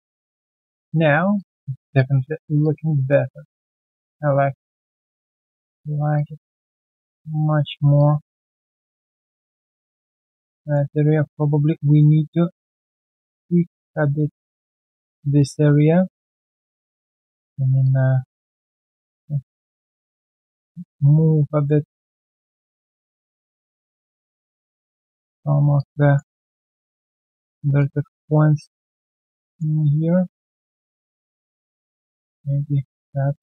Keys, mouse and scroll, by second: 0.1 alt+middle click, 0.2 alt+scroll down 1, 0.5 alt+click, 1.1 alt+right click, 1.3 alt+click, 1.7 alt+right click, 1.9 alt+click, 2.2 alt+middle click, 2.6 alt+click, 3.7 alt+right click, 4.0 alt+click, 4.3 alt+middle click, 4.6 alt+click, 5.8 alt+middle click, 6.1 alt+click, 6.5 alt+middle click, 6.9 alt+click, 7.2 alt+right click, 7.4 alt+middle click, 7.7 alt+right click, 7.9 alt+click, 8.4 alt+right click, 9.0 scroll down 1, 9.4 alt+click, 10.6 alt+right click, 11.1 alt+middle click, 11.4 alt+right click, 11.8 alt+middle click, 12.1 alt+right click, 12.7 alt+middle click, 13.3 right click, 15.5 alt+middle click, 16.3 w, 19.6-20.0 alt+scroll down 1, 20.0 alt+middle click, 22.2 alt+right click, 22.5 alt+middle click, 24.0 alt+middle click, 26.4 alt+middle click, 26.7 alt+right click, 30.1 scroll down 1, 31.1 alt+middle click.